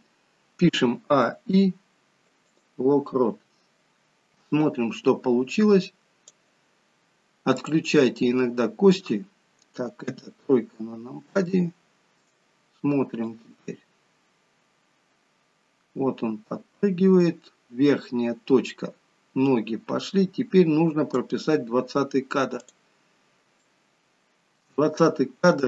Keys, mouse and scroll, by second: 0.7 a, 1.1 i, 4.3 click, 7.5 click, 8.1 middle click, 9.9 KP_3, 11.4 shift+middle click, 13.3 click, 22.5 click, 23.5 shift+middle click.